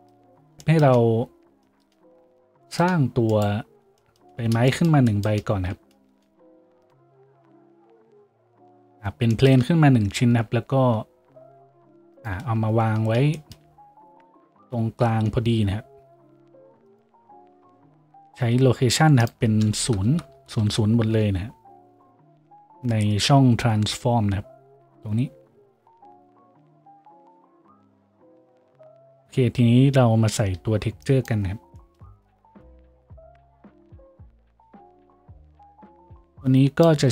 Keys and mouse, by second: 5.7 a, 8.2 z, 8.7 z, 9.5-13.2 right drag, 10.2 g, 13.2-26.7 shift+middle drag, 15.3 n, 26.7-37.1 drag, 26.7-32.0 right drag, 26.7 n, 32.7 shift+z.